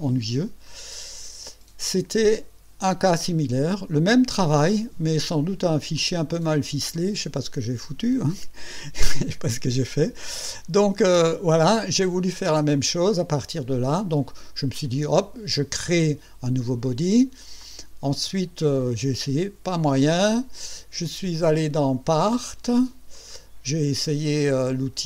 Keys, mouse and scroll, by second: 3.3-4.5 drag, 5.9-6.9 drag, 10.7 click, 11.0 space, 11.6-12.5 drag, 12.7 click, 14.7 click, 22.4 click, 23.1 click.